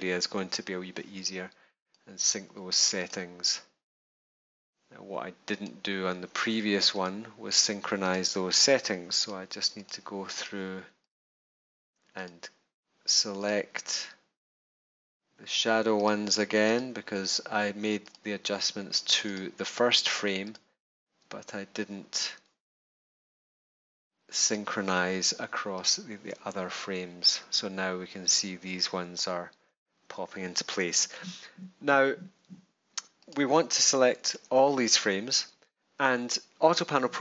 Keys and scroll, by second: 34.3 super+a.